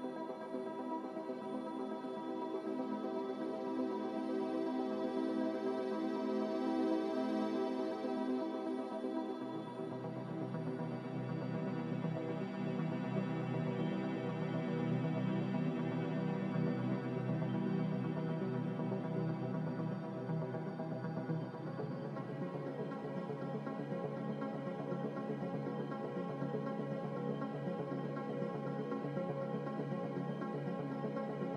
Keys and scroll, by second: 1.1 a, 5.5 5, 5.5 Return, 17.8 5, 17.9 Return, 29.6 ctrl+z.